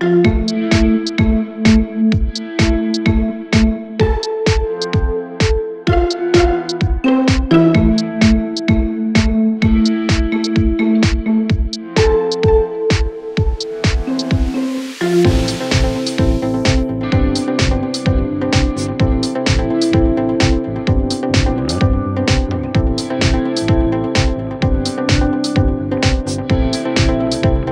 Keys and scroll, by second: 4.6 shift+F2, 5.1 F3, 14.8 F3, 20.5 F3.